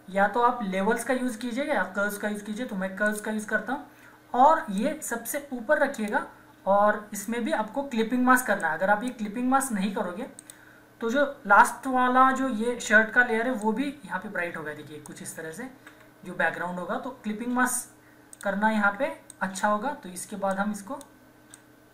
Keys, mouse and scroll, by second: 3.0-8.6 drag, 8.6-10.4 drag, 13.6-15.7 drag, 15.6 z, 18.3-21.9 alt+drag.